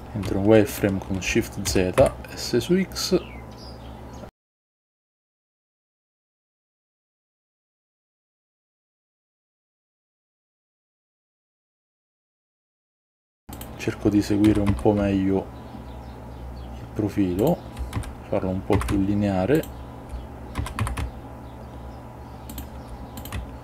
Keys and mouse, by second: 0.8 shift+click, 1.8 s, 2.1 x, 4.7 click, 5.3 click, 6.6 s, 6.9 x, 8.9 shift+click, 9.7 click, 10.3 shift+click, 10.9 s, 12.2 click, 13.6 shift+click, 14.6 s, 14.8 x, 17.5 shift+click, 18.0 s, 18.9 x, 19.7 shift+click, 20.7 s, 20.9 x, 22.6 shift+click, 23.3 click.